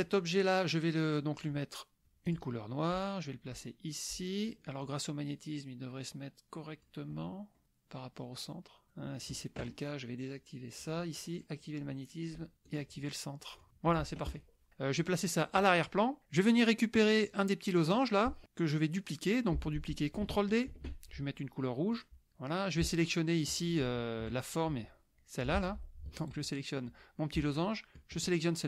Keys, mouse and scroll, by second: 0.1 click, 1.1 click, 2.3 click, 3.2-4.6 drag, 4.9-7.0 drag, 7.2 middle click, 7.6-9.6 drag, 10.8 click, 11.4 click, 12.7 click, 13.6 click, 15.6 click, 17.5 click, 20.7 ctrl+d, 22.1 click, 24.5-25.6 shift+drag, 25.6 ctrl+z, 26.6 shift+click, 28.3 shift+click.